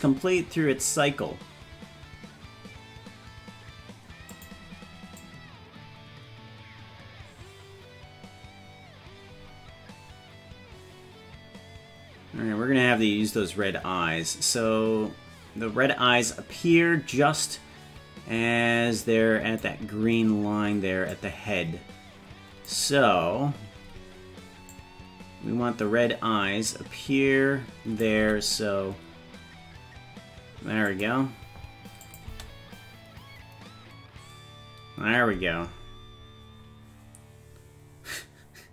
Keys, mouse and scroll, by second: 5.2-19.7 drag, 21.2-22.7 drag, 24.8-28.1 drag, 28.2 g, 32.1 click, 32.3 space.